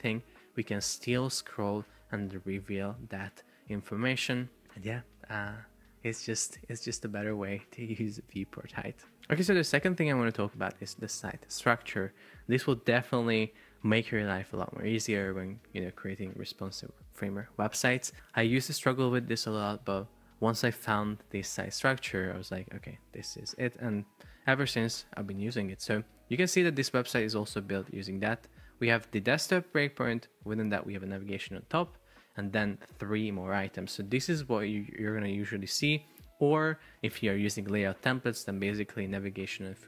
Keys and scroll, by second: 5.2 Escape.